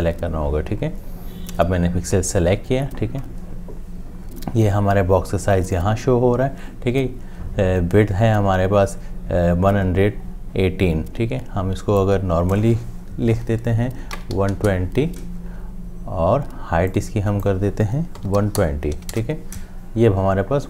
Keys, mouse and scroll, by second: 13.9-14.9 typing, 18.0-19.1 typing, 19.1 Return.